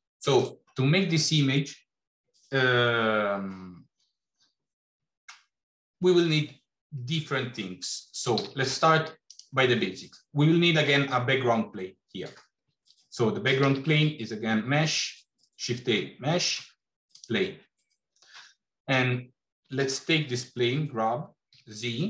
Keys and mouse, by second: 8.3 g, 13.5 shift+a, 19.4 g.